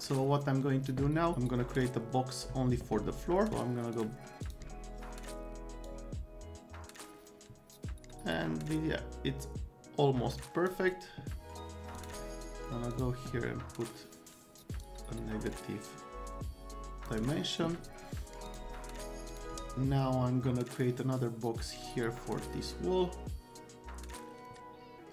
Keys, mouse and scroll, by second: 0.0 click, 3.9 click, 4.4 click, 5.8-10.7 drag, 11.9 click, 12.9 click, 14.8-17.0 drag, 18.4 click, 19.3 click, 20.8-25.1 drag.